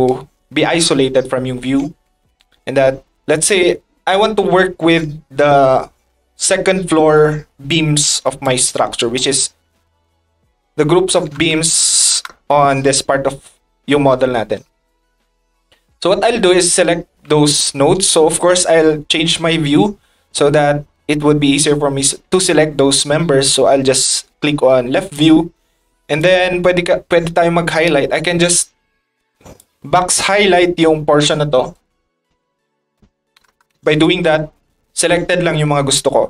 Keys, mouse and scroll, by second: 8.4-9.2 drag, 29.6-31.7 drag.